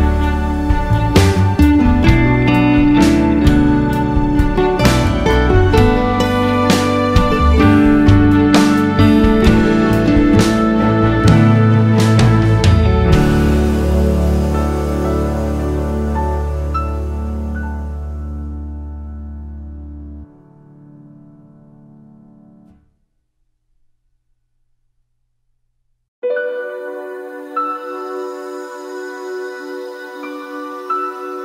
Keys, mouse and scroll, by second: 0.7 x, 0.9 `, 4.0-6.8 drag, 6.9 Tab, 7.3 alt+a, 8.1 click, 8.5 1, 8.6 2, 9.3 `, 9.6 alt+a, 9.9 click, 10.5 ctrl+b, 12.7 alt+a, 13.1 1, 13.3 click, 13.8 k, 15.5 alt+a, 15.7 `, 17.9 scroll up 1, 18.3 2, 19.1 alt+shift+click, 20.7 ctrl+e, 21.1 alt+click, 21.5 ctrl+e, 22.0 `, 22.2 Tab, 22.4 `, 23.0 alt+click, 25.1 ctrl+e, 25.2 1, 25.4 ctrl+z, 27.7 click, 28.0 ctrl+z, 28.9 click, 29.3 alt+a.